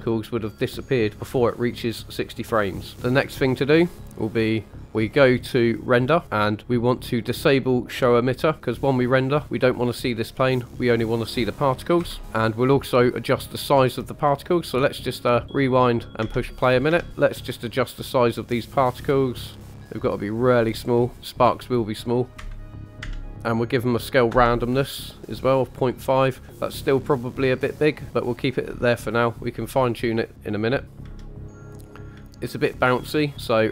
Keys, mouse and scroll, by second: 2.9-3.2 scroll up 5, 4.8-5.1 scroll down 3, 7.3 click, 8.5-9.0 middle drag, 8.6-8.9 drag, 12.0 KP_1, 13.6 scroll up 1, 16.1 click, 16.2 space, 16.9 space, 18.5 click, 18.9 click, 19.4 click, 20.5-21.1 scroll up 3, 21.4 click, 26.0-26.4 scroll down 1, 27.7 click, 28.1-28.6 drag, 28.8-29.4 shift+middle drag, 30.9 click, 31.0 space, 32.1 space.